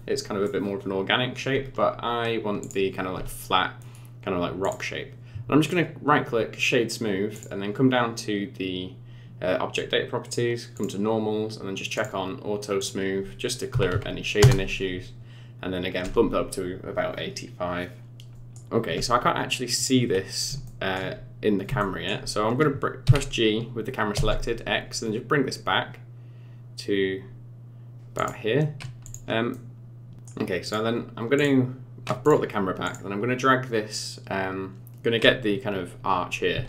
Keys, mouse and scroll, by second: 2.6 click, 3.8 right click, 7.3 click, 10.8 click, 12.0 click, 12.8 click, 18.3 middle click, 18.3-19.8 scroll down 6, 19.8 click, 20.2 scroll down 3, 20.6 shift+middle click, 21.8 shift+middle click, 23.0 g, 29.0 click, 29.5 middle click, 30.6 click, 31.4 click, 32.2 click, 32.8 click, 36.5 g.